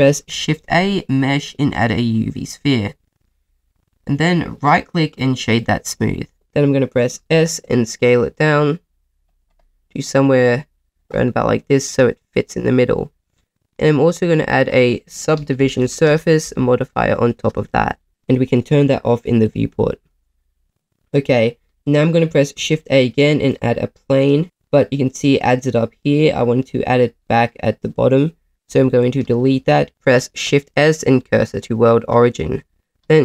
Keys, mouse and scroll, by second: 0.3 shift+a, 2.4 middle click, 4.6 right click, 7.1 s, 9.2 click, 9.6 middle click, 10.4 s, 11.0 click, 11.2 middle click, 13.0 middle click, 16.1-18.1 drag, 19.4 click, 20.1 middle click, 21.0 middle click, 22.5 shift+a, 24.9 middle click, 27.2 middle click, 28.7 x, 29.9 shift+a, 29.9 shift+s, 30.4 shift+s, 32.7 shift+a.